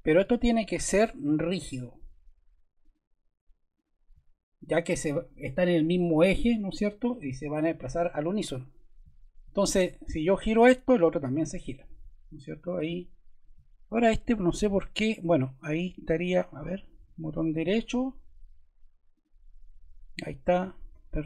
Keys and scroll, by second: 20.9 Escape.